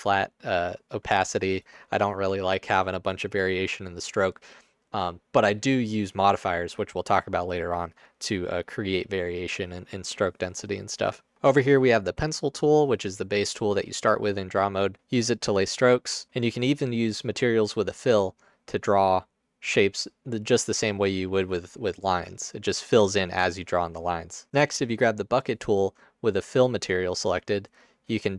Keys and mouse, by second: 11.4 ctrl+z, 15.6 click, 18.1 click, 22.3-23.4 drag.